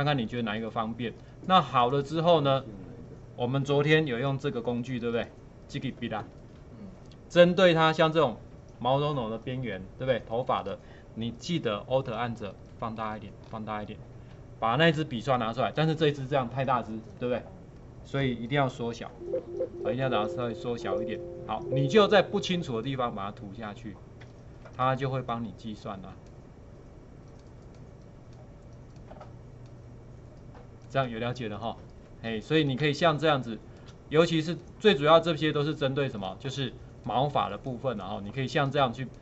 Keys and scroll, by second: 19.1-20.7 typing, 33.1 space.